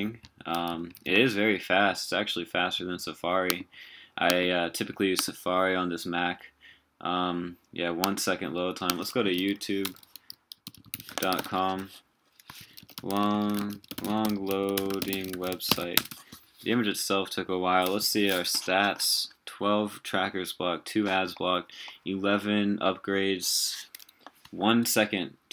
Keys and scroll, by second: 0.9 super+w, 12.6 super+t, 13.6 super+a, 18.0 super+t.